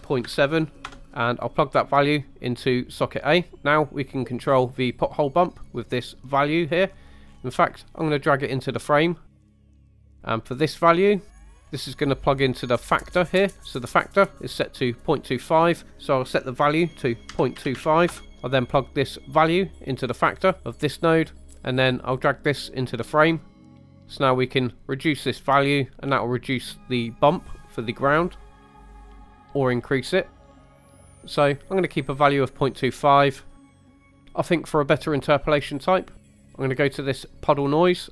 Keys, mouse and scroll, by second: 1.7-3.3 drag, 3.7 middle click, 4.4 scroll down 2, 4.8 middle click, 6.0 click, 7.3 scroll up 2, 8.1-9.3 drag, 9.3 middle click, 9.5 click, 9.7 scroll down 2, 9.9 middle click, 10.2-11.5 drag, 11.6 scroll up 2, 12.1 middle click, 15.7-18.1 drag, 19.2-21.1 drag, 21.8-22.9 drag, 23.5 click, 23.7 middle click, 23.8 scroll up 2, 23.9 shift+middle drag, 26.0 click, 28.2 click, 29.3 click, 29.7 click, 31.0 click, 33.5-34.1 scroll down 4, 33.6 middle click, 34.1 middle click, 35.9 scroll up 2, 36.2 middle click, 36.5 scroll up 2, 37.0 middle click.